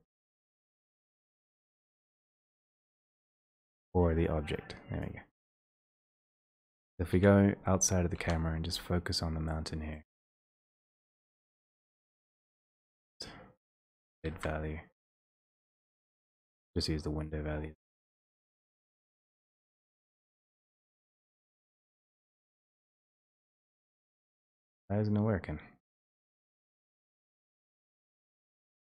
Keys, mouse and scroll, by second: 0.9 click, 0.9 typing, 9.8 click, 9.8 f, 11.1 click, 14.2 right click, 14.5 ctrl+z, 16.9 click, 20.6 click, 20.7-21.0 scroll down 7, 21.9 middle click, 22.9 middle click, 26.6 click, 26.9 ctrl+z.